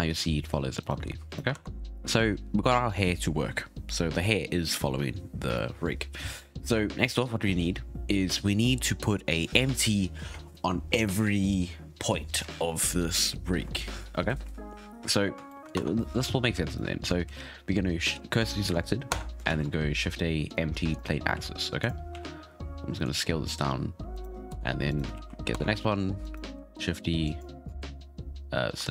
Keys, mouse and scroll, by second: 0.8 right click, 0.9 r, 1.5 ctrl+Tab, 1.7 scroll down 2, 7.0-7.5 scroll up 4, 7.5-10.5 scroll down 1, 14.4-15.4 scroll up 3, 15.4 shift+middle drag, 15.7 Tab, 16.6 right click, 17.2 shift+s, 19.1 Tab, 19.4 shift+a, 21.3 s, 22.1 s, 24.1 right click, 24.5 Tab, 24.9 right click, 25.1 shift+s, 25.5 Tab, 26.2 right click, 26.7 shift+d, 27.7 shift+s.